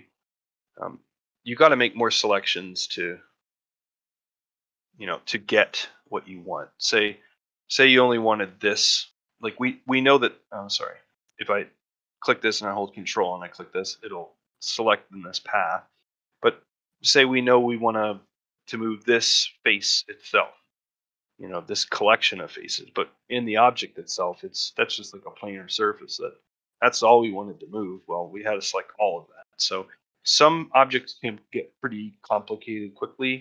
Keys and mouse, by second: 0.0 shift+middle click, 0.8 click, 1.2 click, 1.5 click, 2.3 shift+click, 3.5 shift+click, 3.9 shift+click, 4.4 shift+click, 4.8 shift+click, 5.9 middle click, 6.8 ctrl+middle click, 7.1 middle click, 7.9 shift+click, 8.3 shift+click, 13.3-16.9 middle drag, 17.1 shift+middle click, 17.9 shift+middle click, 20.8-22.5 middle drag, 23.3-24.4 middle drag, 25.7 middle click, 27.2 middle click, 27.6 shift+middle click, 27.9 middle click, 29.0 shift+middle click, 29.3 ctrl+middle click, 30.1 ctrl+middle click, 30.4 shift+middle click, 32.2 middle click, 32.8-33.4 middle drag.